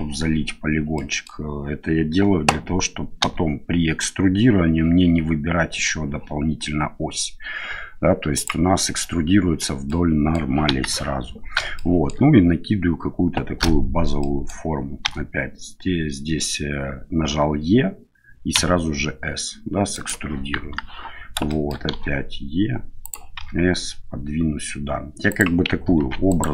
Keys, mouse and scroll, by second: 0.9 middle click, 3.2 e, 9.9 middle click, 10.7 KP_1, 11.7 middle click, 14.2 middle click, 15.0 e, 20.5 KP_1, 21.6 shift+middle click, 21.9 e, 23.3 s, 26.0 ctrl+r.